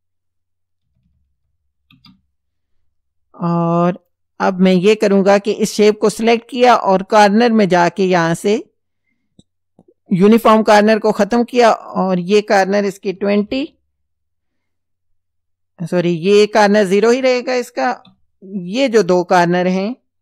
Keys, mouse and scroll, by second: 0.9 KP_3, 1.9 KP_Enter, 4.0 click, 8.1 click, 10.2 click, 11.9 click, 13.2 KP_2, 13.4 KP_0, 16.9 click, 17.9 KP_0, 19.1 click.